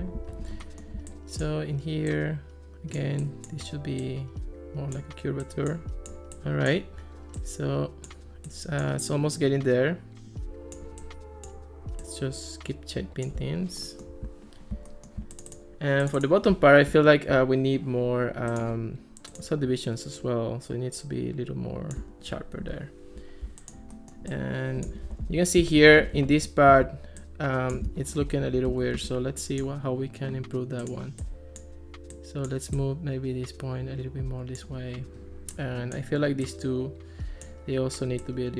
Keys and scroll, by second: 22.6 Escape, 25.3 alt+r, 26.9 ctrl+s, 27.9 x, 28.7 ctrl+x.